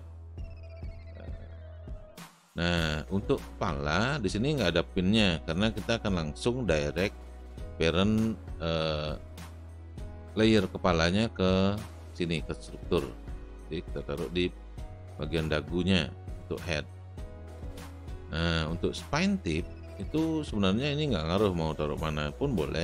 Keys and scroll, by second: 19.7 space.